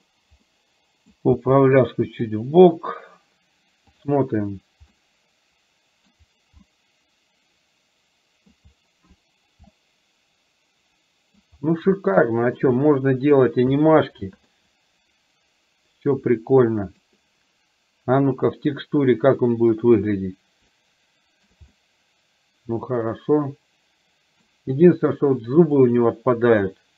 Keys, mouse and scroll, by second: 0.0 click, 0.5-1.1 middle drag, 1.5 g, 4.0 click, 5.1-6.3 middle drag, 6.8-8.6 middle drag, 9.9-11.5 middle drag, 12.1-12.6 shift+middle drag, 14.6-17.1 middle drag, 19.0 click, 20.8-21.5 shift+middle drag, 21.8-24.4 middle drag, 25.8 click.